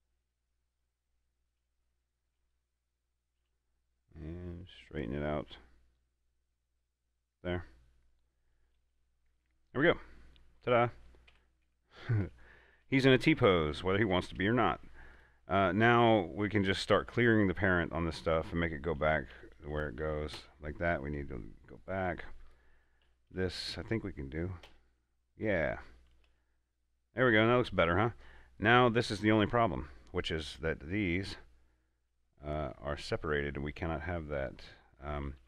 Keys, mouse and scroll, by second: 1.0 right click, 2.2 shift+s, 2.7 click, 3.7 r, 7.7 click, 10.8 scroll down 1, 11.6 Tab, 12.5 a, 13.1 Tab, 14.0 a, 14.4 Tab, 15.5 right click, 19.4 right click, 19.6 alt+p, 19.7 alt+[, 20.3 Down, 20.7 Return, 22.1 right click, 23.4 alt+p, 23.9 Down, 25.0 Return, 26.6 a, 28.9 a, 28.9 right click, 30.9 middle click, 31.5 scroll up 1, 32.4 middle click, 32.9 scroll down 1, 33.4 middle click, 34.6-35.1 scroll down 1, 35.1 middle click.